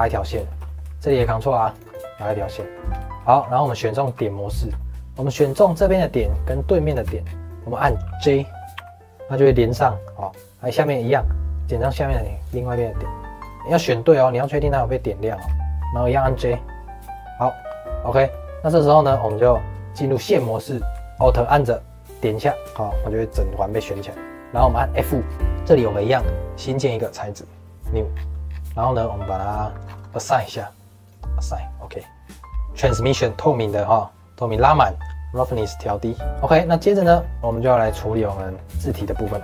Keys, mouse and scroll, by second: 1.0 ctrl+r, 2.1 scroll down 1, 2.3-4.0 shift+middle drag, 4.0 1, 4.5 shift+middle click, 5.5 click, 5.9 middle click, 6.8 shift+click, 7.2 scroll down 2, 7.4-8.7 middle drag, 8.7 j, 9.0-10.2 middle drag, 10.2 scroll down 1, 10.7 click, 11.1-12.4 middle drag, 12.4 shift+click, 13.4 click, 13.7-15.1 middle drag, 15.1 shift+click, 15.7 middle click, 16.3 j, 17.1-19.0 middle drag, 19.0 scroll up 2, 19.2 2, 22.1 alt+click, 22.6-23.9 middle drag, 23.9 scroll down 2, 24.1 middle click, 24.7 middle click, 25.0-25.4 scroll up 6, 25.4-26.8 middle drag, 26.8-28.1 drag, 28.1 scroll down 2, 28.7-29.8 scroll down 8, 30.0-30.5 scroll up 8, 31.0-32.2 drag, 32.2-32.5 scroll down 9, 32.5-33.8 drag, 35.6 click, 36.4 shift+middle click, 36.9 scroll down 1, 37.1 middle click, 37.4 click, 37.7 shift+middle click, 38.6 click, 38.8 shift+middle click, 39.2 scroll down 2, 39.3 shift+middle click.